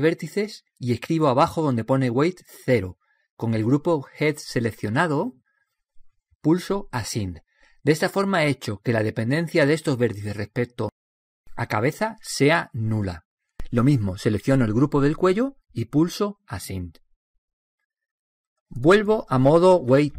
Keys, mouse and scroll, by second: 0.0-5.0 drag, 6.3-8.0 drag, 8.3-10.3 drag, 15.7-19.1 drag.